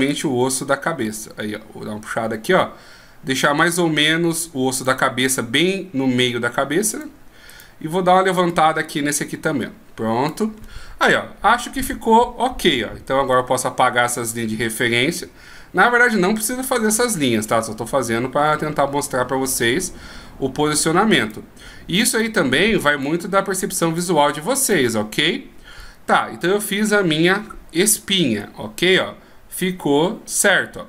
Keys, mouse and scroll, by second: 0.3 click, 7.1 right click, 7.7 right click, 8.7 click, 12.2 scroll down 1, 13.4 d, 13.5 right click, 19.7 d, 21.4 right click, 22.3 right click, 23.2 click, 24.9 middle click.